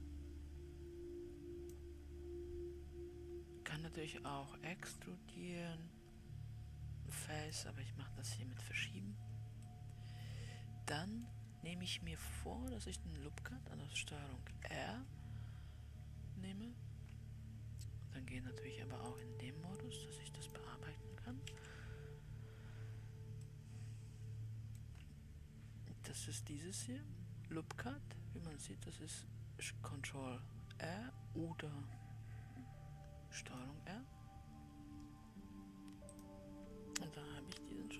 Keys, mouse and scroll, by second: 4.7-7.5 drag, 8.9 Escape, 10.2-11.7 middle drag, 11.7-14.8 scroll up 1, 15.5 shift+r, 19.6-20.9 drag, 21.6 shift+r, 23.9-33.7 middle drag, 33.7-37.9 drag.